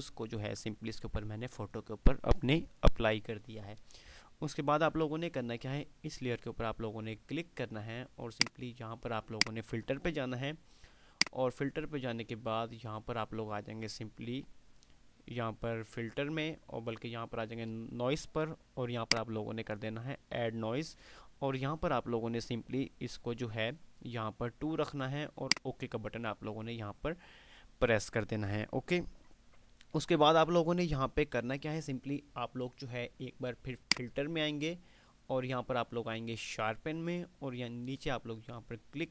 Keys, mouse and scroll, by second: 8.5 click, 19.2 click, 25.6 click, 33.9 click, 38.1 click.